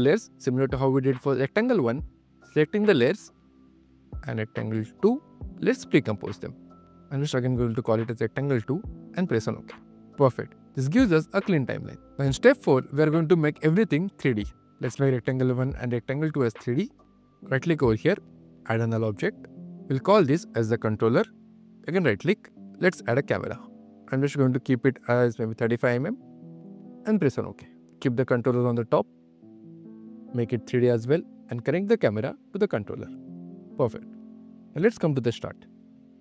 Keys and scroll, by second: 0.5 super+q, 2.2 q, 3.6 q, 13.7 q, 20.2 Return, 21.4 n, 27.7 q.